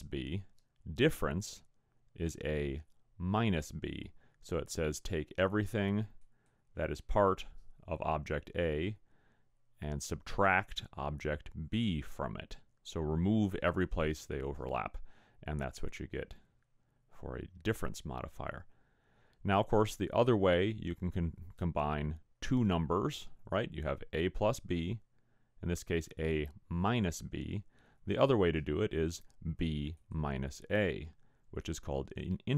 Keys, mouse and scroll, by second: 30.0 click.